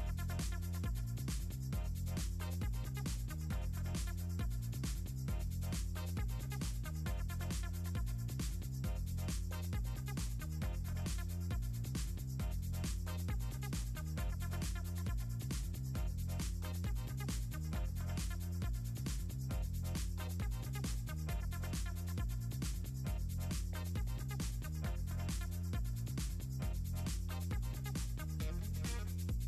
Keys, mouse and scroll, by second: 1.1 click, 1.5 shift+click, 1.9 shift+click, 2.9 middle click, 4.0 click, 4.3 click, 4.5 click, 4.8 click, 5.1 click, 5.7 click, 7.6 middle click, 8.9 drag, 9.4 click, 9.6 click, 9.9 ctrl+c, 10.3 click, 10.8 ctrl+v, 11.8 click, 12.7 click, 13.3 click, 13.7 click, 13.9 click, 14.3 click, 17.2 click, 17.8 click, 19.8 click, 20.8 click, 21.8 click, 22.1 click, 23.6-24.7 drag, 25.3 shift+click, 26.0 ctrl+z, 26.7 click, 27.4 click, 29.1 click.